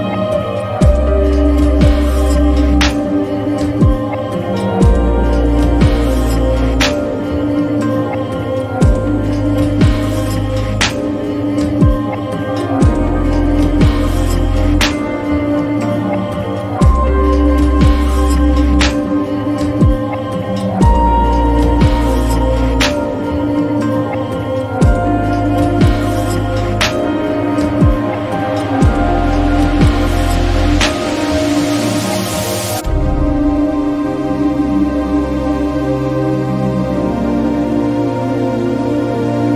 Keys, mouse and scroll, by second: 0.0 click, 3.8-6.4 drag, 6.7-19.1 drag, 8.6 typing, 19.1 ctrl+t, 23.7-28.1 drag, 36.7 click.